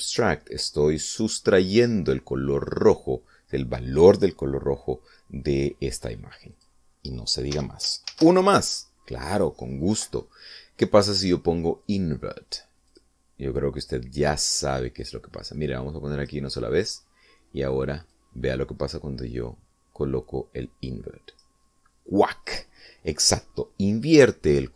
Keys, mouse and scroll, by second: 0.8 click, 7.4 click, 8.4 x, 9.0 shift+a, 12.8 click, 13.8 click, 15.9-17.3 drag, 19.0-22.4 drag.